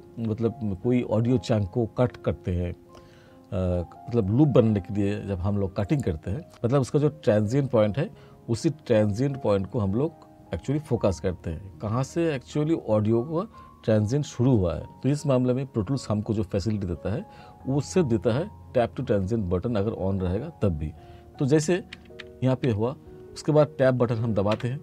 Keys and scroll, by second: 21.6 r, 24.6 Tab.